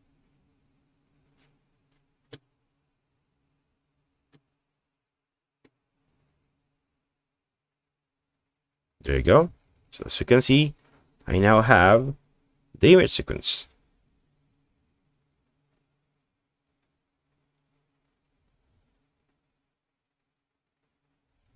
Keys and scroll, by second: 11.9 Right, 12.3 Right, 12.5 Right, 12.7 Right, 12.8 Right, 13.3 Right, 13.9 Right, 14.5-15.1 Right, 15.1 Right, 16.0-16.9 Right, 17.9 Right, 18.4 Right, 19.4 Right, 20.0 Right, 20.6 Right, 20.8 Right, 21.0 Right, 21.4-21.5 Right.